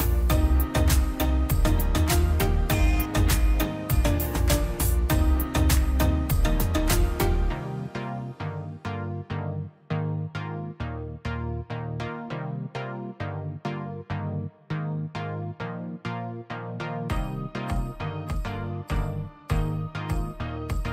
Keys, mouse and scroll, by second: 0.3 scroll up 1, 0.8 middle click, 1.7-2.1 scroll down 1, 2.7 scroll up 1, 3.6 click, 3.8 scroll up 1, 4.2-7.3 drag, 7.5 scroll down 1, 7.9 scroll up 1, 8.1 scroll, 8.2-8.5 scroll down 1, 9.0 p, 9.2-12.6 drag, 12.6-13.0 scroll up 1, 13.4 click, 14.1 scroll down 1, 14.3 middle click, 14.8-15.5 scroll up 1, 15.5 middle click, 16.1 scroll up 1, 17.8 click, 19.2 click.